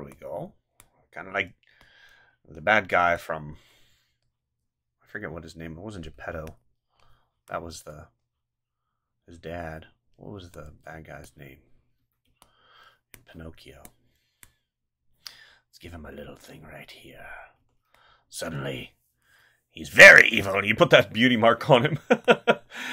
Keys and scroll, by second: 6.1 space, 10.4 space, 12.0 ctrl+z, 17.6 space, 21.8 space.